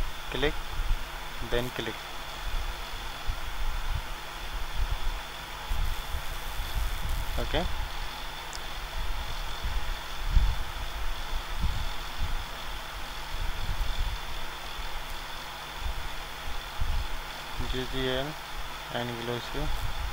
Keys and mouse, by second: 7.9-20.1 drag.